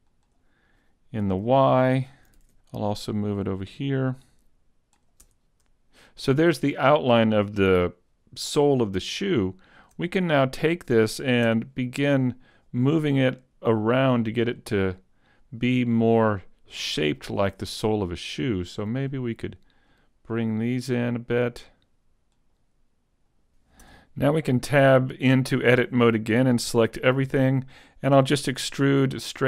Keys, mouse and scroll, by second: 2.1 Tab, 2.3 ctrl+alt+Left, 5.2 Tab, 9.2 shift+middle click, 10.1 middle click, 11.5 Tab, 12.5 right click, 13.7 click, 13.7 click, 16.8 middle click, 17.9 right click, 18.9 click, 20.5 right click, 21.8 click, 21.9 click, 23.1 middle click, 23.3 right click, 23.5 shift+middle click, 23.5 KP_3, 23.9 Tab, 26.7 a, 27.0 a, 28.6 e, 29.2 click.